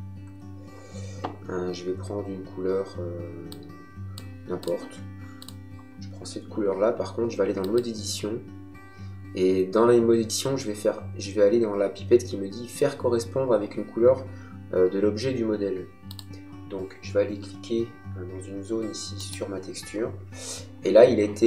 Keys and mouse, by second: 3.4 click, 7.5 click, 16.1 click, 19.2 click.